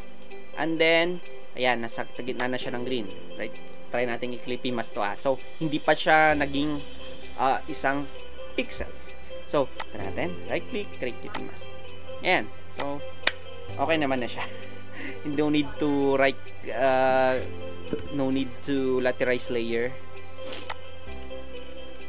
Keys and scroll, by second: 18.3 Escape.